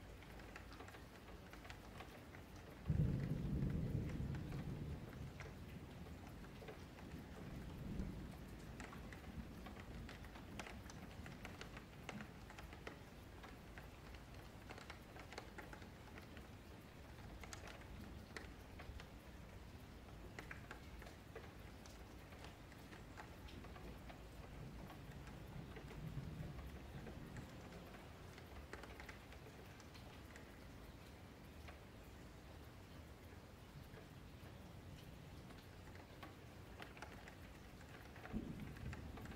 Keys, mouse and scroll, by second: 0.7-1.1 scroll up 10, 1.1-2.6 shift+middle drag, 2.6 click, 4.1 middle click, 4.5 F3, 4.6 scroll down 5, 4.9-6.8 middle drag, 6.8 scroll up 4, 7.0-9.9 middle drag, 9.9 click, 11.3-12.5 middle drag, 12.5 click, 14.6 middle click, 15.0 Tab, 15.4-16.8 middle drag, 16.8 click, 17.3 Tab, 17.6 middle click, 18.2 1, 18.5 click, 19.7 2, 19.9 click, 20.3 click, 20.6 click, 21.1 q, 21.8 1, 22.0 click, 23.0 click, 24.3 Tab, 24.6 click, 25.0 scroll down 2, 25.2 click, 25.5 Tab, 25.7-26.7 middle drag, 26.7 scroll up 3, 26.9 middle click, 27.5 Tab, 27.6-32.2 middle drag, 32.2-32.9 scroll down 5, 32.9 alt+q, 33.3 click, 33.5 scroll up 1, 33.7 middle click, 33.8-34.8 scroll down 1, 34.8-36.2 middle drag, 36.2 ,, 37.4-38.6 middle drag, 38.6 click.